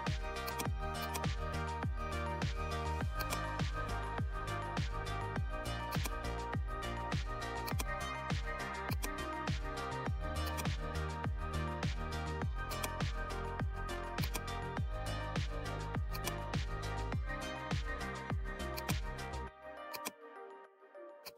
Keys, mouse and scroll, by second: 4.7 ctrl+z, 5.8-10.4 drag, 11.1 alt+scroll up 1, 11.7 alt+scroll up 1, 12.6 click, 13.2-14.1 scroll up 1, 14.1-17.3 drag, 17.3-17.7 scroll up 1, 18.7 click, 18.7-21.3 drag.